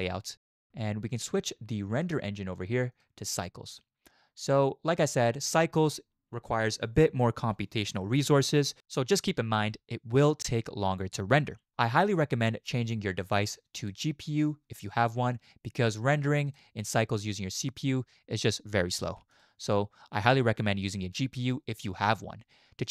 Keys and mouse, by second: 0.0 click, 2.1 click, 3.0-3.8 drag, 13.8-16.5 drag, 19.5-22.9 drag.